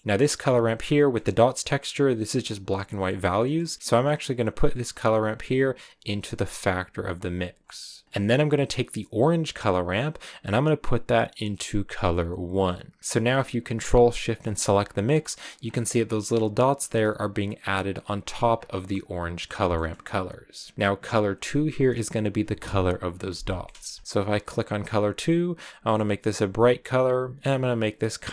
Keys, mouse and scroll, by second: 0.0 click, 0.9 scroll up 5, 1.7-2.9 scroll up 3, 2.9 scroll down 1, 3.2-5.5 middle drag, 5.5 click, 7.1-12.3 drag, 13.0 scroll up 3, 14.3 ctrl+shift+click, 15.2 scroll down 1, 15.5 scroll up 3, 17.6-18.1 scroll up 1, 18.1-25.8 drag.